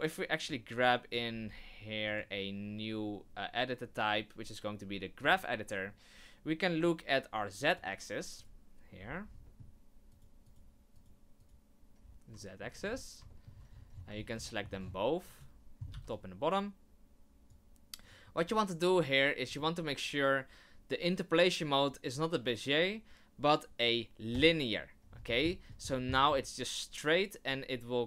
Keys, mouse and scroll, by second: 0.5 click, 6.8 click.